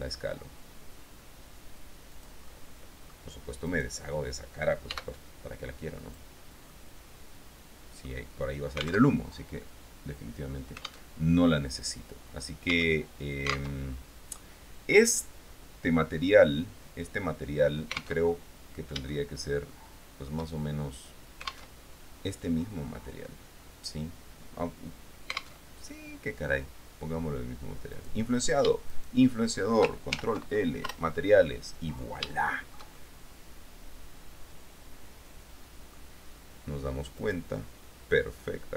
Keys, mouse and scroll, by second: 2.3 click, 2.7 click, 3.8 right click, 5.0 x, 6.2 click, 6.8-8.4 middle drag, 9.2 alt+Tab, 10.0-11.4 drag, 11.4 alt+Tab, 12.9 Tab, 13.9 alt+Tab, 18.4 alt+Tab, 19.3-20.6 shift+middle drag, 21.9 alt+Tab, 25.8 alt+Tab, 28.1 right click, 29.1 shift+right click, 30.3 ctrl+shift+l, 31.0 Return, 32.6-36.3 shift+drag, 37.4 right click, 38.6-38.7 drag.